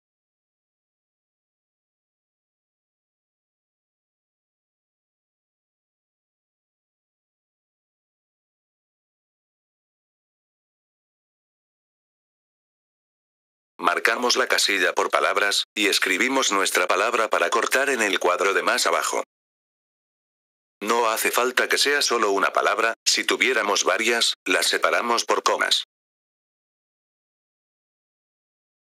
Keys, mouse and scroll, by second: 5.0 click, 7.9-10.2 drag, 11.1-12.9 drag, 13.4 F4, 13.7-18.9 drag, 18.9-19.3 typing, 21.4 typing.